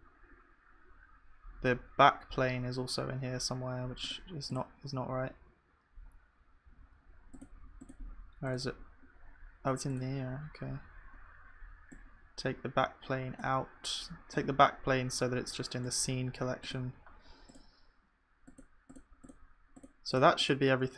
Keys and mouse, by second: 7.3 click.